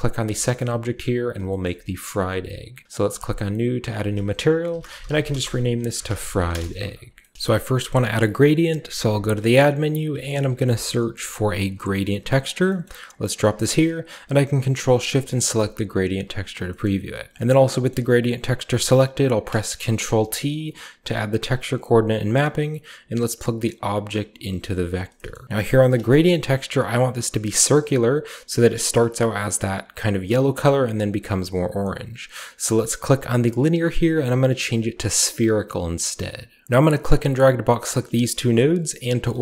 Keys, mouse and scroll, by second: 0.2-0.5 shift+right drag, 0.5 shift+middle click, 1.6 shift+middle click, 2.2 shift+click, 3.1 click, 3.9 click, 4.6-5.8 shift+drag, 4.7-7.0 typing, 7.3-8.8 middle drag, 8.8 a, 9.2 click, 10.0-10.5 typing, 11.7 click, 12.4 click, 13.0 middle click, 14.9 ctrl+shift+click, 17.3 click, 19.1 ctrl+t, 19.1 ctrl+middle drag, 19.6 middle click, 19.8 a, 20.4-22.6 drag, 23.1-24.1 drag, 24.6 g, 24.8 drag, 25.3 a, 25.5 click, 26.2-27.5 shift+scroll up 2, 27.7-29.5 shift+scroll up 1, 27.8-29.5 shift+middle drag, 31.6 click, 34.2 click, 35.0-35.7 scroll down 1, 35.7 click, 36.6 middle click, 36.7-37.4 drag, 37.7 click.